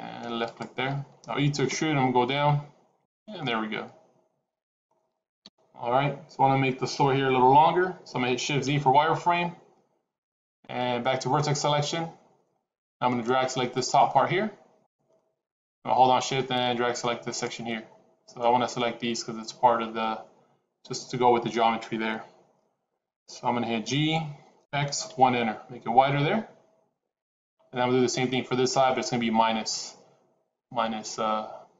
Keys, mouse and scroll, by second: 1.6 e, 3.3 middle click, 5.3 KP_1, 9.2 shift+z, 11.3 click, 13.1 click, 16.0 shift+click, 23.7 g.